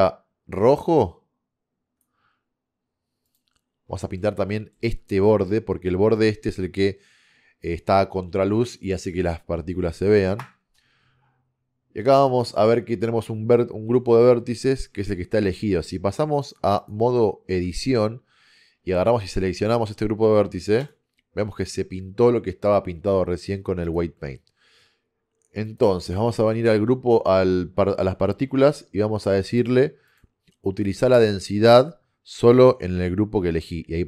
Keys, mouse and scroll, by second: 3.9 click, 4.3-6.5 middle drag, 6.5 click, 10.4 KP_0, 16.5 click, 17.7 Tab, 21.1 click, 26.6 Tab, 29.7-32.0 drag.